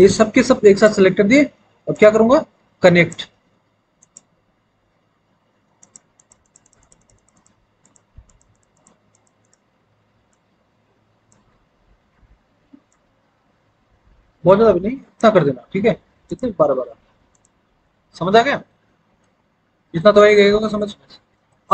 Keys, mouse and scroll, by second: 11.4 ctrl+z.